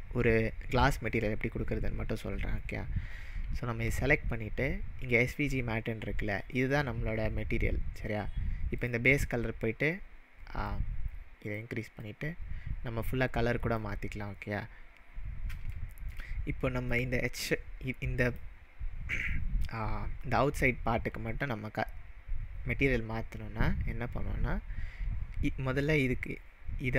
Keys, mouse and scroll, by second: 8.8 click, 15.8-16.3 shift+middle drag, 16.9 click, 18.3 click.